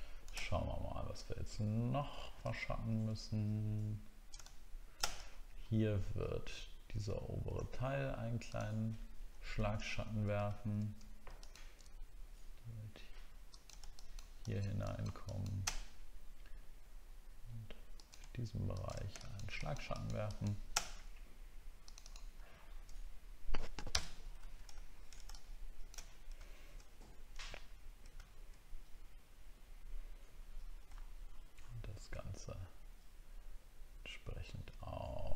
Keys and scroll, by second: 1.6 alt+scroll down 1, 2.5 alt+scroll up 1, 5.3 alt+scroll up 1, 9.9 alt+scroll up 1, 22.5 alt+scroll down 1, 23.9 ctrl+BackSpace, 24.4 ctrl+d, 24.8 alt+scroll down 1, 26.6 alt+scroll down 1, 28.2 alt+scroll down 1, 31.0 alt+scroll up 1, 31.6-32.0 alt+scroll up 2.